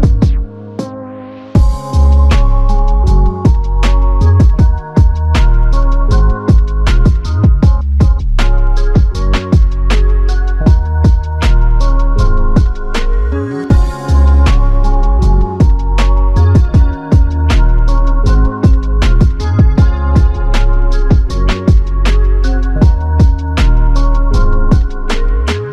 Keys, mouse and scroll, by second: 5.1 double click, 8.0 alt+click, 12.3 double click, 14.7 double click, 23.1 ctrl+click.